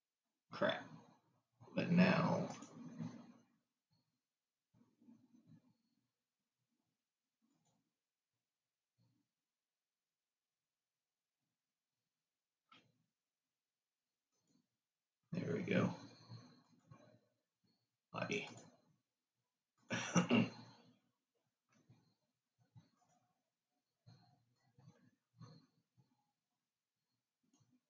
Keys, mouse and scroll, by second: 2.9-5.9 drag, 7.9-11.1 drag, 14.6-17.1 drag, 18.9 click, 20.0 click, 23.3-25.5 drag.